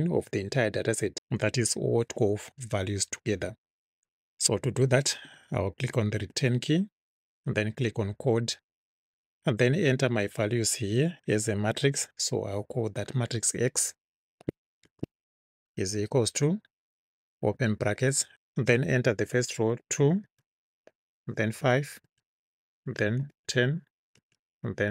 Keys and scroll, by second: 6.2 Return, 14.9 shift+x, 16.0 =, 17.6 [, 19.7 2, 20.3 space, 21.5 5, 22.1 space, 23.3 1, 23.7 0, 24.2 space.